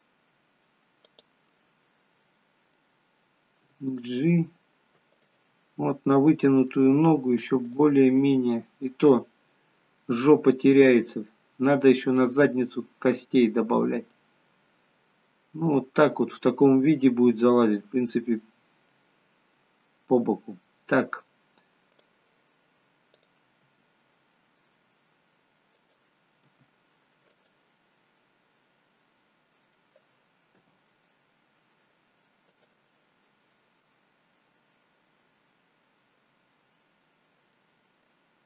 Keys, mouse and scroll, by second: 1.5 middle click, 3.6 g, 5.4 middle click, 7.6 click, 7.9 middle click, 9.5-10.6 scroll down 2, 10.0 middle click, 12.2 middle click, 16.6 middle click, 17.7-18.5 scroll up 4, 18.5-18.9 scroll down 1, 18.9 middle click, 21.8 click, 23.2 click, 23.6 g, 26.4 r, 27.7 middle click, 30.5 g, 32.9 middle click, 34.6 middle click.